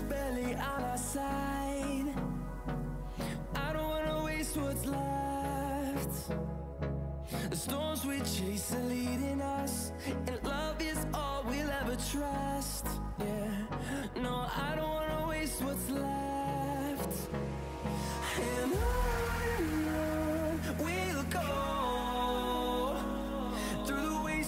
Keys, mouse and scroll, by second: 2.4 typing, 5.7 click, 5.7 typing, 10.4 click, 12.7-13.1 typing, 14.0 click, 17.8 click, 20.9 click.